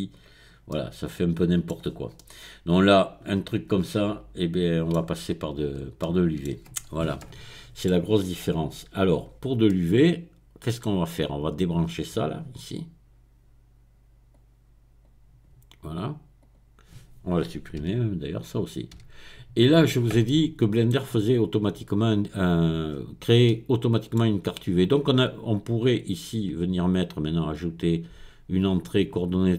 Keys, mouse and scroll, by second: 1.7-2.2 scroll down 2, 5.4-6.0 shift+scroll down 2, 6.6 shift+middle click, 6.8-7.7 scroll down 1, 8.0 middle click, 8.4-9.0 scroll up 1, 9.0 scroll up 1, 9.2-9.7 scroll down 1, 9.7-13.3 middle drag, 14.3-15.4 drag, 16.4 click, 17.8 x, 18.9 x, 20.2 middle click, 22.9-23.4 scroll up 1, 23.4 middle click, 24.2-25.0 scroll down 1, 27.3 click.